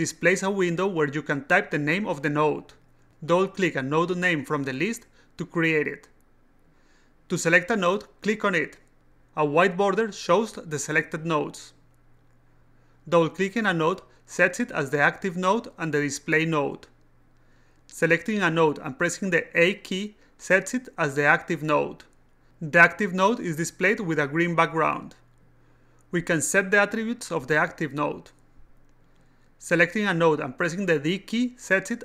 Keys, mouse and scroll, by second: 2.8-3.9 typing, 4.6 click, 4.8 click, 8.1 click, 9.4 click, 13.8 click, 13.9 click, 18.6 click, 19.2 a, 23.8 click, 23.9 click, 30.7 click, 31.6 d.